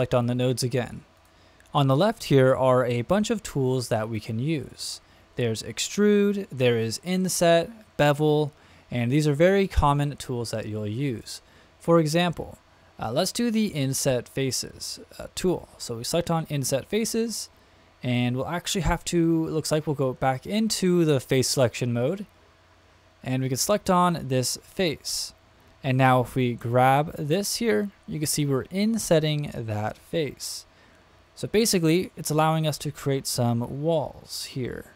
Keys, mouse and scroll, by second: 0.5-0.8 drag, 1.1 click, 15.7 click, 21.5 click, 23.7 click, 25.8-31.8 drag.